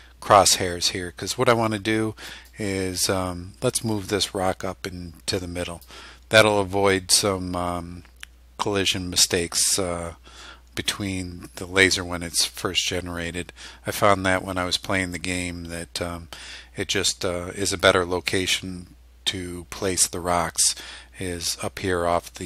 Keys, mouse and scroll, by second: 2.5-6.1 drag.